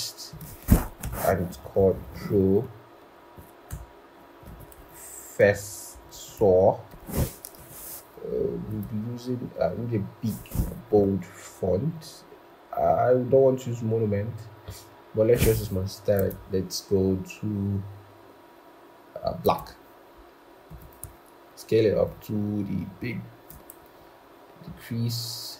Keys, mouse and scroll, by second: 1.6 typing, 3.1 typing, 3.6 Return, 4.4 typing, 5.8-6.3 typing, 5.9 Return, 7.3 typing, 22.0 shift+click, 23.9 alt+Up.